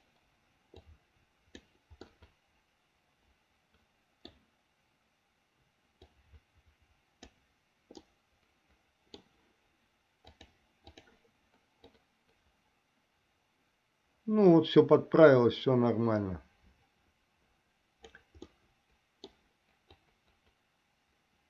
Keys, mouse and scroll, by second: 1.1 click, 2.4-4.7 middle drag, 6.2-7.7 drag, 8.3-9.4 middle drag, 10.4 click, 12.2-18.4 drag, 18.8 middle click, 20.3-21.4 drag.